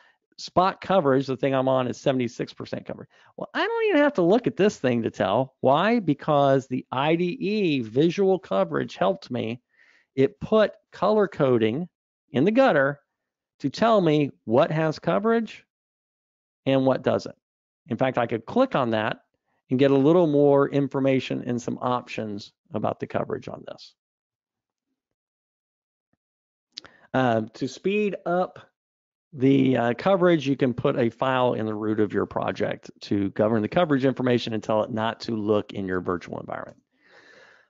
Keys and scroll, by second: 25.2 super+Up.